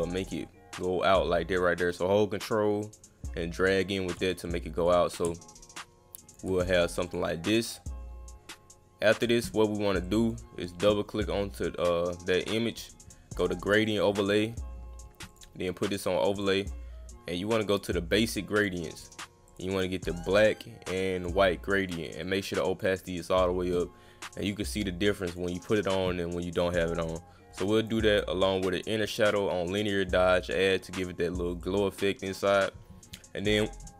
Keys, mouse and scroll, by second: 4.4 click, 5.6 ctrl+click, 6.5-7.2 scroll up 1, 7.1 click, 7.8-9.2 drag, 7.9 scroll up 1, 9.9 scroll up 1, 10.1 click, 10.2 click, 12.7 click, 13.0 click, 13.9 click, 15.3 click, 16.3 click, 17.7 click, 18.2 click, 18.6 click, 19.5 click, 21.2 click, 22.2-22.8 drag, 24.4 click, 24.7 click, 25.2 click, 25.7 click, 27.8 click, 28.1 click, 29.4 click, 31.6 click, 33.4 click.